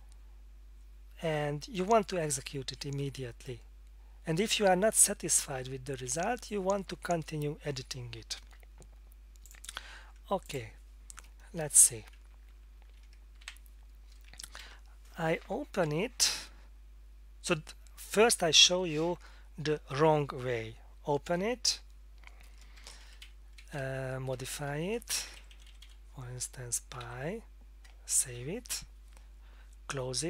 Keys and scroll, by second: 12.8 alt+F2, 13.4 c, 14.3 Tab, 14.6 Down, 21.3 F4, 22.8 Down, 23.2 Right, 23.6 Right, 23.8 Left, 24.0 Left, 24.2 Left, 24.4 Left, 25.2 Delete, 25.4 Delete, 25.5 Delete, 25.7 Delete, 25.8 Delete, 26.7-27.5 typing, 28.2 ctrl+s.